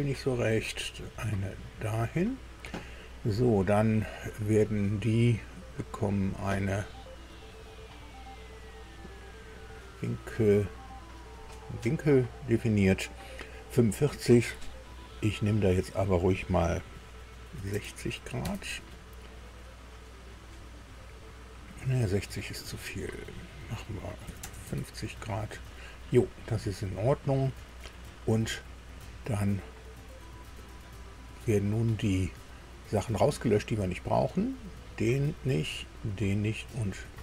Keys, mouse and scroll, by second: 0.3 click, 1.6 click, 2.1 right click, 5.3 click, 8.4 click, 9.5 click, 11.3 click, 17.5 KP_6, 17.7 KP_0, 18.4 KP_Enter, 22.4 right click, 23.0 click, 24.2 KP_5, 24.4 KP_0, 24.6 KP_Enter, 32.1 click, 34.5 click, 36.0 click.